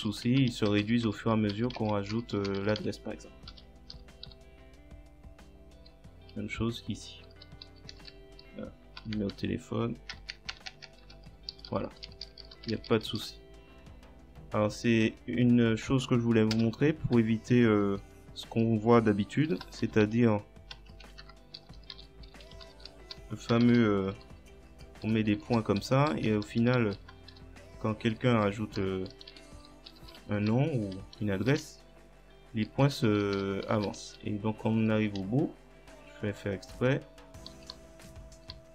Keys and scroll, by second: 0.0-3.9 typing, 7.3 space, 7.7 e, 10.2 0, 11.5-12.7 typing, 16.6 Return, 17.0 Up, 19.3-24.1 typing, 21.2 Caps_Lock, 25.9 Left, 27.7-34.0 typing, 35.2 f.